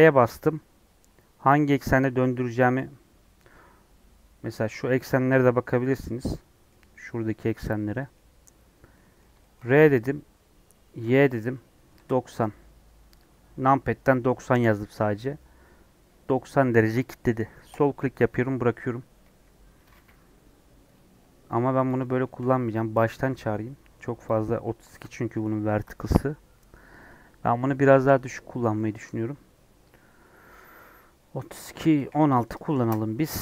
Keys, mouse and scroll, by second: 5.7-7.7 middle drag, 7.7 scroll down 2, 7.9 middle click, 8.1-8.9 scroll up 4, 8.9 middle click, 9.8 r, 19.2 KP_1, 21.8 x, 24.2 shift+a, 32.7-33.4 drag.